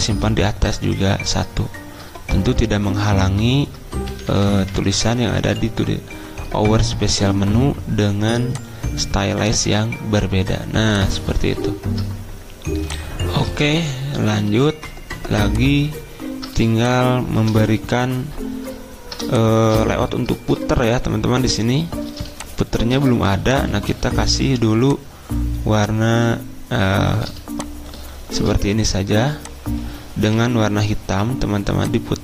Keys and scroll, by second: 13.4 v, 14.4 ctrl+z, 23.5 m, 28.3 v, 30.3 d.